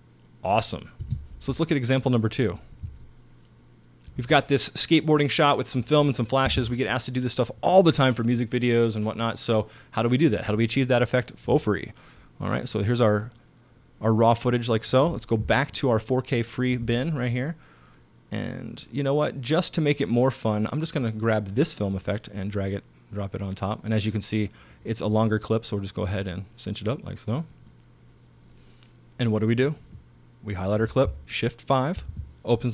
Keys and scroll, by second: 1.0 space, 2.9 space, 6.5 space, 32.0 shift+5.